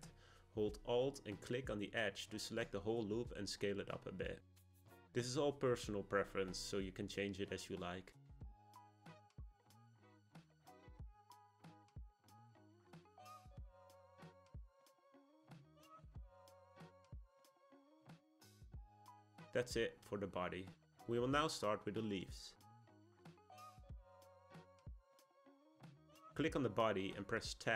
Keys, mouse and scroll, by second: 1.6 alt+click, 3.4 s, 8.6 click, 8.9-11.5 middle drag, 11.5-12.4 scroll up 1, 12.4 alt+click, 12.9 middle click, 13.4-14.0 scroll down 1, 14.0 g, 15.6 click, 16.0-18.6 middle drag, 18.6 Tab, 19.4 click, 19.9-22.9 middle drag, 26.0 click.